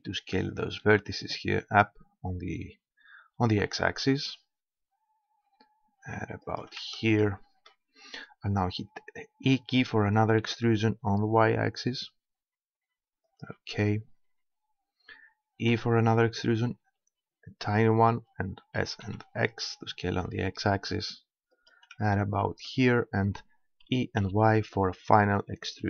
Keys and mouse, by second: 6.6-9.0 drag, 9.5 e, 13.4-15.4 drag, 15.4 middle click, 15.7 e, 17.8-19.5 drag, 18.7 s, 21.7-23.5 drag, 23.9 e.